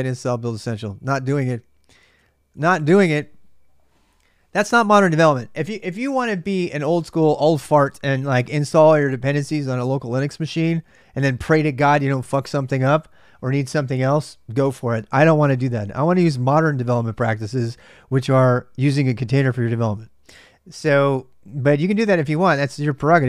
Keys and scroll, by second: 20.3-21.2 typing, 22.5-23.2 typing.